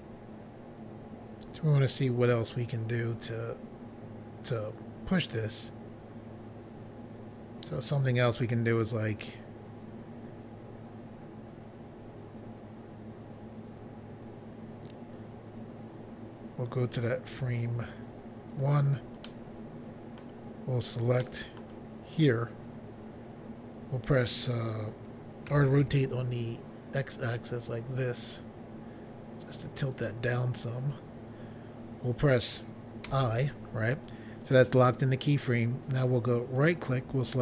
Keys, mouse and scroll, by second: 19.3 middle click, 20.2 scroll up 1, 21.2 middle click, 22.2 click, 25.6-25.9 typing, 30.0 click, 30.1 click, 33.1 i, 36.4 right click.